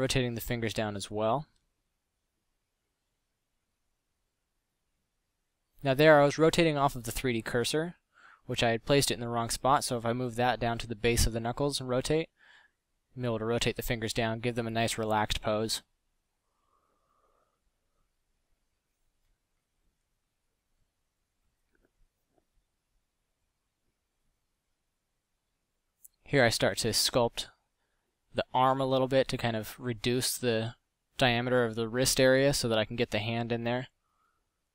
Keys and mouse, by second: 3.3 z, 3.8 KP_5, 6.3 ctrl+z, 6.7 KP_1, 8.5 KP_1, 8.7 z, 9.9 KP_5, 11.2 r, 12.7 Tab, 12.9 z, 25.1 f, 33.3 click, 33.7 drag.